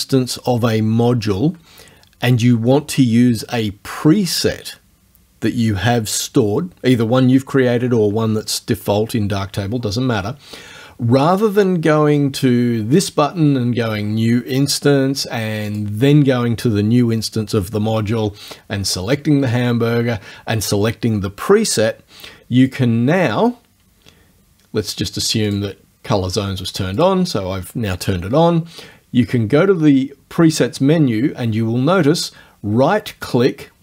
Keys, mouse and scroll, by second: 13.0 click, 15.7 click, 19.1 click, 22.7 click, 25.5 click, 27.0 click.